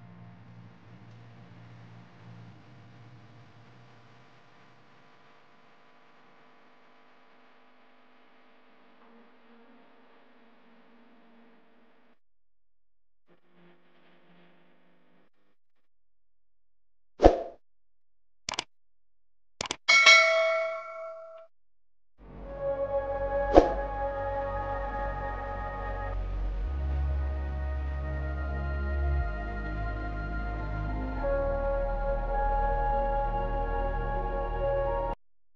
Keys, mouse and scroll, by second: 1.1-3.1 shift+middle drag, 3.7 s, 8.3-9.4 drag, 10.9 click, 14.6 Tab, 15.2 click, 15.8-16.7 middle drag, 16.7 alt+z, 17.3-19.3 middle drag, 19.3 click, 21.1 shift+d, 22.2 click, 25.3 r, 28.9 alt+z, 29.7 KP_1, 30.9 click, 31.9 s, 34.1 click.